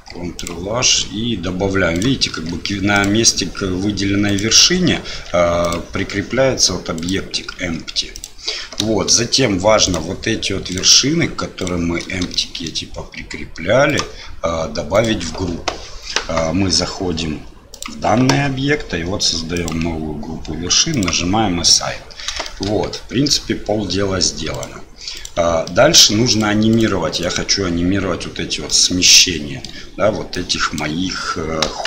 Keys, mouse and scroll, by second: 1.9 click, 2.3 ctrl+h, 4.2 click, 5.0 ctrl+h, 7.5 ctrl+h, 9.0-10.6 shift+drag, 11.6 shift+click, 12.3 shift+middle click, 13.8 shift+click, 14.9 shift+click, 17.7 click, 19.5 click, 22.4 shift+middle click, 22.9 Tab, 24.5 click, 25.1 click, 25.6 middle click, 26.3 click, 26.7 click, 27.1 click, 28.7 middle click, 30.5 click, 31.6 KP_1.